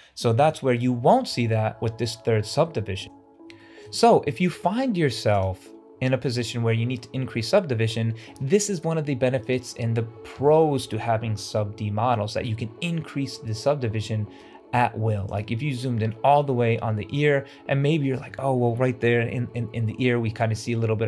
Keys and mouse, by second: 0.3-0.7 shift+middle drag, 3.5 shift+middle click, 5.9 shift+middle drag, 14.3-14.6 shift+middle drag.